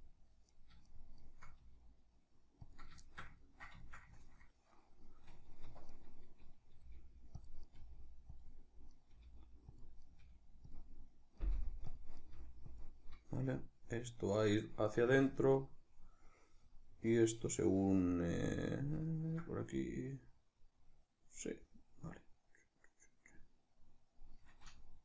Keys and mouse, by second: 0.3 right click, 0.6 shift+right click, 0.9 shift+right click, 1.3 g, 2.5 click, 2.8-5.7 shift+middle drag, 5.4 1, 5.7 right click, 6.6 g, 7.2 click, 7.4 right click, 7.5 g, 8.2 click, 8.7 right click, 8.9 g, 9.6 click, 9.8 right click, 9.9 g, 10.5 click, 11.1 right click, 11.3 g, 11.7 click, 11.9 right click, 12.1 g, 12.5 click, 17.9 right click, 18.4 shift+right click, 18.8 shift+right click.